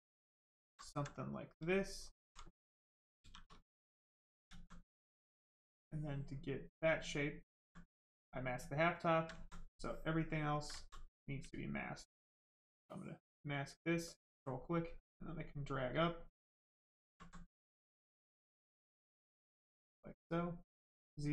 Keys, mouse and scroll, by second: 0.9 right click, 1.7 alt+right click, 3.2 shift+f, 4.5 alt+right click, 5.3 ctrl+right click, 5.8 ctrl+click, 9.4 alt+right click, 10.3 ctrl+right click, 10.5 ctrl+click, 12.9 ctrl+click, 17.2 alt+right click, 18.0 ctrl+right click, 19.2 click.